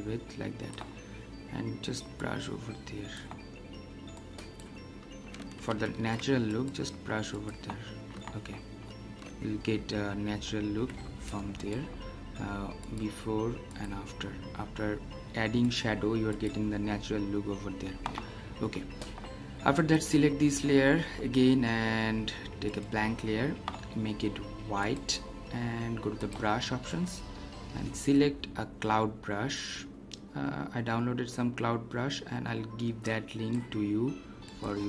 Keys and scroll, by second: 5.8 ctrl+alt+z.